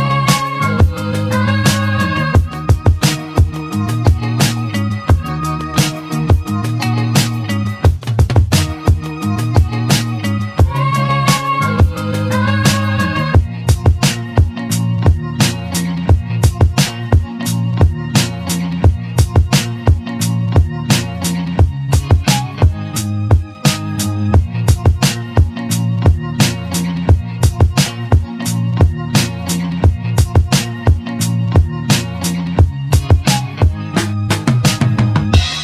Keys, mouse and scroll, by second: 0.2-2.8 middle drag, 3.5 click, 4.2 Tab, 4.5 click, 5.5-6.0 scroll down 2, 6.0 click, 7.4 click, 10.5 click, 11.5-14.1 middle drag, 18.1-20.6 drag, 22.3-34.9 drag, 23.7-24.0 scroll down 1, 24.0-26.5 middle drag, 28.9-29.3 scroll down 1, 29.3-31.9 shift+middle drag, 31.9-32.6 scroll up 4, 32.6-33.8 scroll down 3, 33.8 ctrl+a, 34.9 ctrl+a.